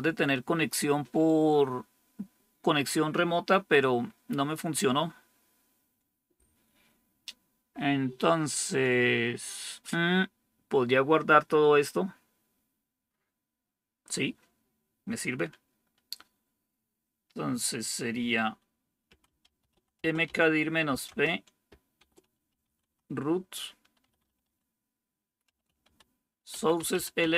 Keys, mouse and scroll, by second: 18.7-27.3 typing.